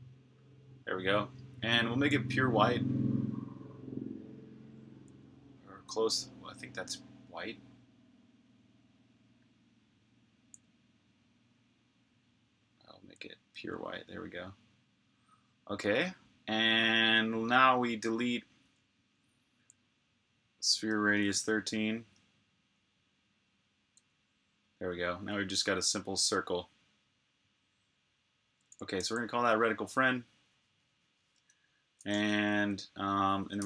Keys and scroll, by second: 21.2 3, 21.9 Return, 28.9 super+s, 31.2 super+Tab, 33.3-33.6 typing.